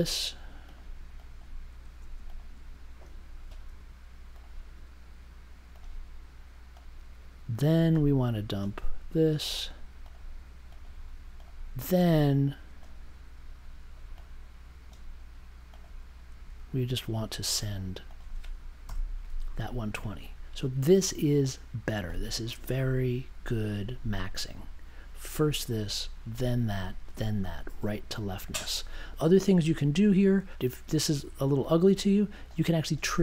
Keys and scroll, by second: 2.1 space, 18.8 BackSpace.